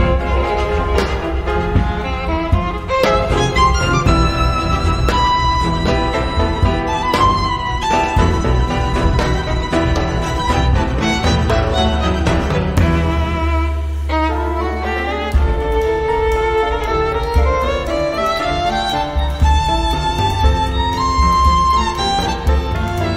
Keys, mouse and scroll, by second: 0.1 space, 1.2 click, 2.1 click, 3.9-5.8 drag, 9.1 click, 9.5 space, 10.0 click, 10.8-13.3 drag, 15.2 click, 16.5 click, 18.0 ctrl+click, 19.5 click, 22.4-23.1 drag.